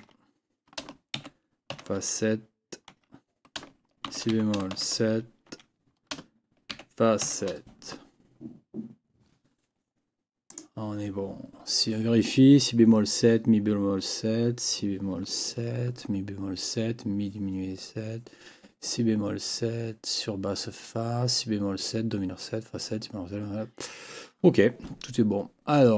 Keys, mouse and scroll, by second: 0.0 Tab, 1.1 shift+f, 2.9 Tab, 4.0 shift+b, 5.5 Tab, 6.7 shift+f, 10.5 click.